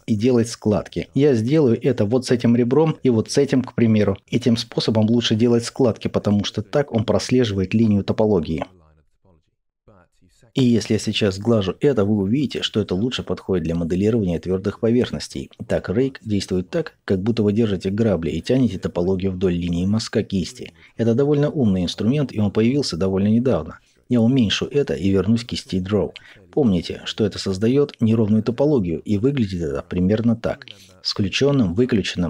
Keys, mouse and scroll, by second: 16.1-27.9 ctrl+middle drag, 27.9-30.4 drag, 30.4-31.6 middle drag, 31.6-32.2 drag.